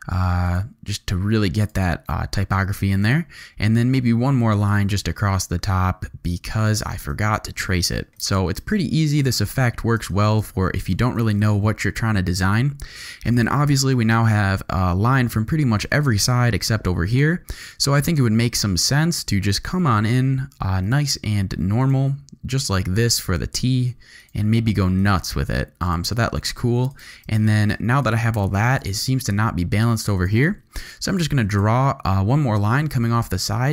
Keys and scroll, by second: 7.7 shift+v, 9.2 z, 10.0 space, 10.5 z, 11.3 alt+space, 12.2 space, 13.1 z, 15.8 z, 16.9 z, 17.6 v, 18.2 g, 26.6 z, 27.3 alt+space, 27.8 z, 28.4 alt+space, 29.3 space, 30.0 z, 30.8 space, 31.2 z, 32.8 alt+g.